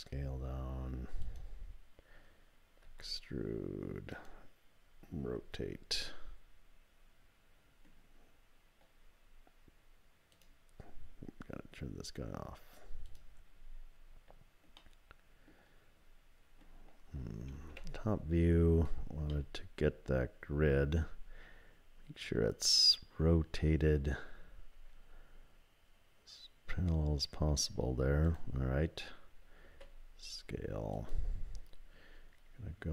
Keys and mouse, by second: 2.8 e, 5.4 r, 8.2 typing, 14.8 middle click, 17.7 KP_7, 19.5-20.8 shift+middle drag, 24.7 r, 29.7 s.